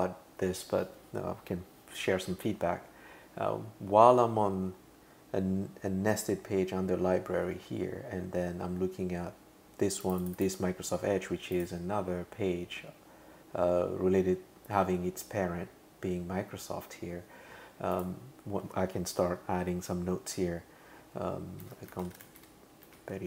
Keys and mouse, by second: 10.0 click, 10.2 click, 10.4 click, 11.5 click, 17.9 click, 21.4-23.2 typing.